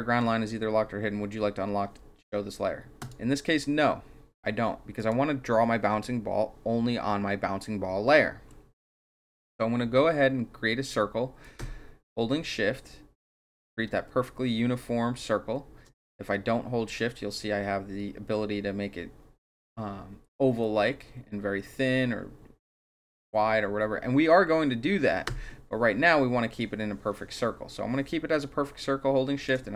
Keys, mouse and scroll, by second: 2.9 click, 4.9 click, 11.4-29.4 shift+drag.